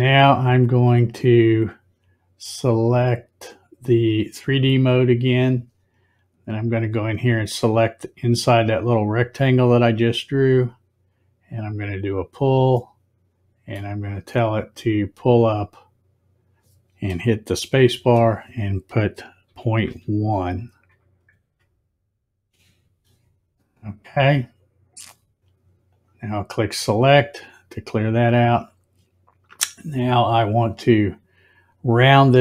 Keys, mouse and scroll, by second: 4.4 click, 9.8 click, 12.0 click, 12.9-13.8 middle drag, 15.4-17.9 drag, 17.9 space, 25.8 click, 28.1 click.